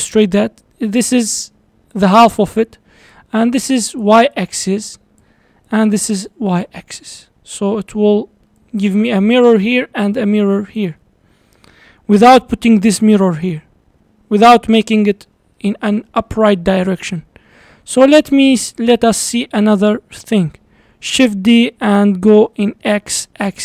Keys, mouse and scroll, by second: 0.4-2.0 drag, 2.0-3.1 d, 3.1-4.0 drag, 4.0-4.3 d, 4.4-5.2 drag, 5.2-5.6 d, 5.7-6.7 drag, 6.7-7.1 d, 8.5 d, 8.6-9.5 drag, 9.5 d, 9.8-10.8 drag, 10.8 d, 11.2 d, 15.6-16.7 middle drag, 16.7-17.6 scroll down 3, 18.7 click, 19.1 scroll down 4, 19.3-21.1 middle drag, 21.1 shift+d.